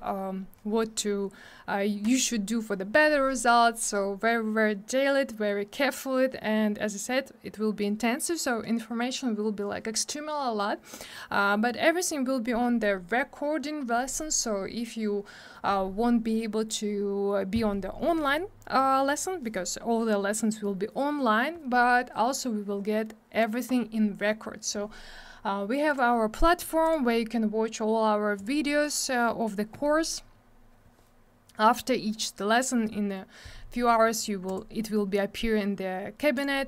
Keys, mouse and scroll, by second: 25.9 click, 25.9 click, 28.3 click.